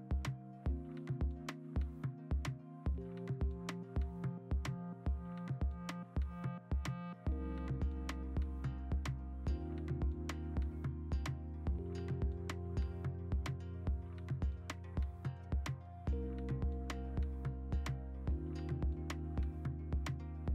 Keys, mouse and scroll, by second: 2.3 ctrl+z, 3.2-4.6 typing, 7.3 v, 9.8 ctrl+t, 10.8 Escape, 11.0 ctrl+t, 11.4 Escape, 11.5 ctrl+t, 13.0 ctrl+t, 14.1 Return, 15.0 alt+Tab, 16.1 w, 16.8 ctrl+d, 17.3 Delete, 17.4 ctrl+d, 17.6 Escape, 18.1 Delete, 18.5 ctrl+d, 18.6 v, 19.0 ctrl+t, 19.6 v.